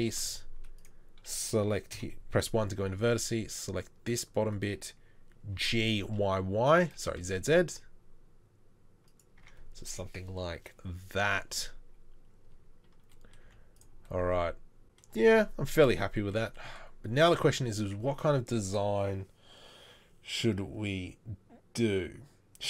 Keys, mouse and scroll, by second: 1.9 1, 3.0 c, 5.6 g, 9.4 Tab, 13.4 z, 17.8 Tab.